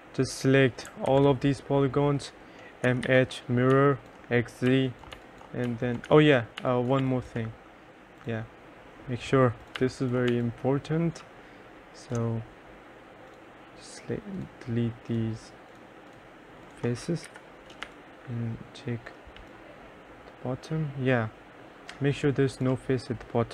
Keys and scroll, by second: 1.2 ctrl+a, 2.7-3.8 typing, 5.2-7.6 typing, 9.8 2, 10.4 3, 17.3 Delete, 17.9 3.